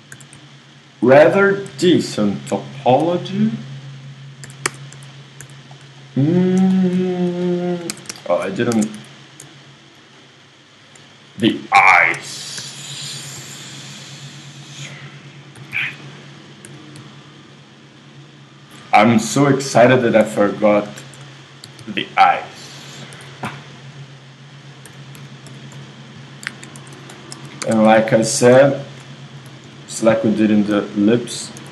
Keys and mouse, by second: 0.1 a, 0.6 ctrl+click, 3.0 g, 4.5 z, 4.7 Tab, 5.0 z, 6.0 z, 8.1 Tab, 8.8 ctrl+Tab, 11.5 KP_3, 12.6 z, 13.4 i, 15.5 g, 16.3-19.6 drag, 16.7 s, 19.3 i, 20.9 f, 21.0 z, 21.7 g, 23.1 e, 24.9 s, 26.5 KP_1, 26.8 z, 27.7 ctrl+Tab, 29.5 alt+m, 31.6 shift+r.